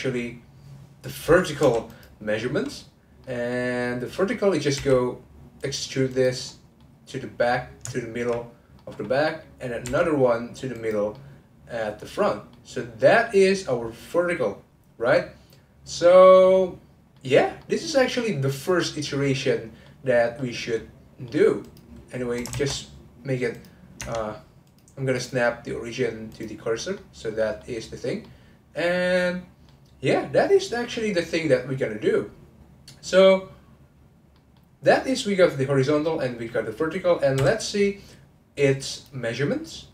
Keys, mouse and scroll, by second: 1.9 click, 2.4-4.7 middle drag, 4.7 e, 6.1 click, 6.4-9.0 middle drag, 9.0-9.8 scroll down 2, 9.8 e, 11.1-20.0 middle drag, 20.0-20.4 scroll up 3, 20.4-21.6 middle drag, 21.6 click, 22.5 shift+s, 24.0 Tab, 24.6-26.8 drag, 26.8-32.7 middle drag, 32.7-34.3 scroll down 2, 34.3-37.3 middle drag, 37.3 n, 38.9 click.